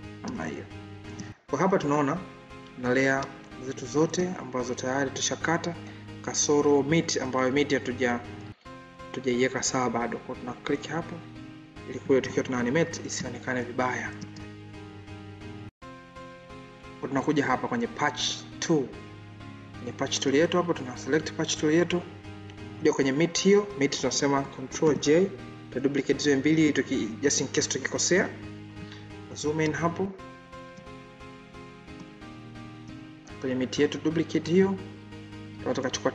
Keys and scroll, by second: 24.7 ctrl+j.